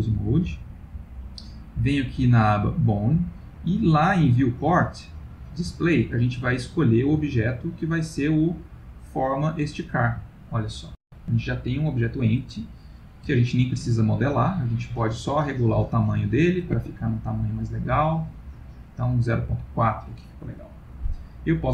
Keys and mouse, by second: 2.6 click, 4.0 click, 5.9 middle click, 7.6 click, 10.3-10.7 ctrl+middle click, 10.4 ctrl+middle click, 10.9 middle click, 11.0 middle click, 11.1 middle click, 12.8 ctrl+middle click, 13.5 ctrl+middle click, 15.3 click, 15.6 click, 17.1 click, 17.3 click, 18.0 click.